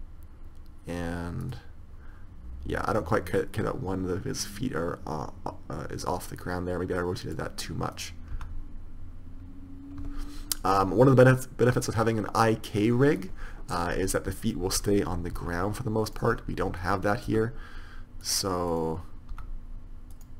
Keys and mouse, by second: 3.9-5.6 drag, 8.3-8.9 right drag, 8.9 r, 14.1-18.6 right drag, 15.7 r, 17.6 r, 19.7 r.